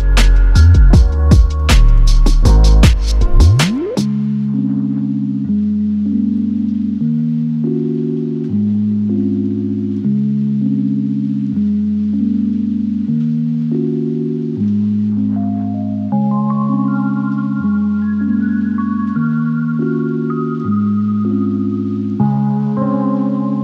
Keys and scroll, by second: 22.2 space.